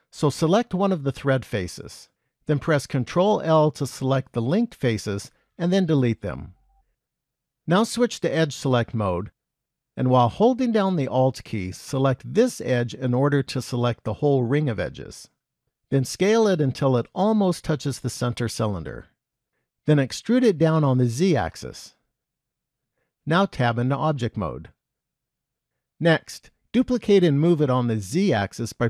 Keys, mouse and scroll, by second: 0.4 click, 3.8 ctrl+l, 5.3 x, 9.1 click, 12.1 alt+click, 16.1 s, 20.5 e, 24.0 Tab, 25.3 KP_1, 26.0-28.8 scroll down 5.